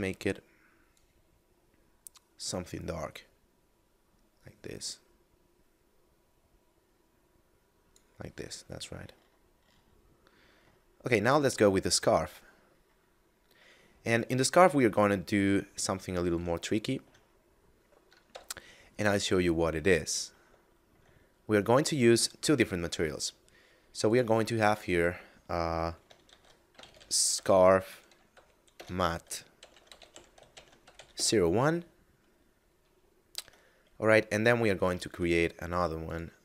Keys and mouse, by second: 8.4 middle click, 10.9 middle click, 14.0 right click, 15.0 middle click, 16.6 shift+middle click, 17.2 middle click, 18.0 KP_Divide, 20.6 shift+middle click, 20.9 middle click, 24.0 click, 26.1 shift+s, 26.6 c, 26.6 a, 26.8 r, 28.5 BackSpace, 29.8-30.8 typing, 31.0 Return, 33.3 Tab, 34.9 ctrl+Tab, 35.9 click.